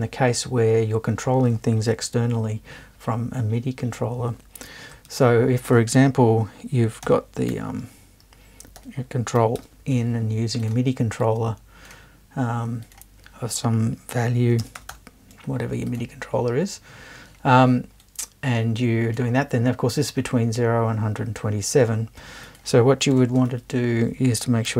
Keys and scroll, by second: 5.1 super+1, 7.0 c, 7.5 t, 8.8 l, 9.6 n, 14.6-15.4 typing, 23.1 BackSpace, 23.5 super+1.